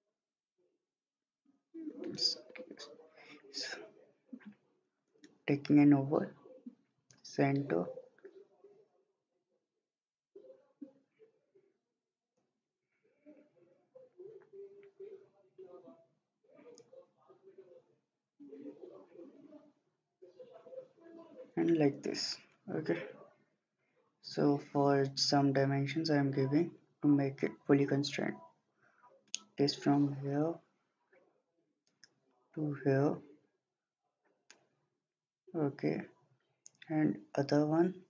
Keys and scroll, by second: 1.9 Escape, 2.5 Escape.